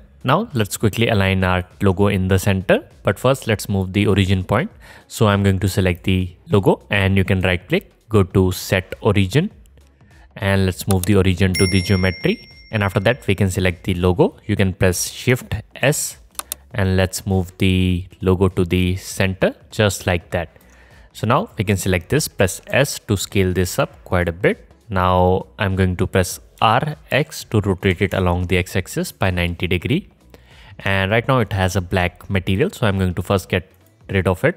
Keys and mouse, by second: 6.0-7.6 middle drag, 12.3 click, 15.9 shift+s, 19.7-34.5 alt+drag, 22.7 s, 26.6 r, 32.5 middle click, 32.5 right click, 33.8 middle click, 33.8 right click.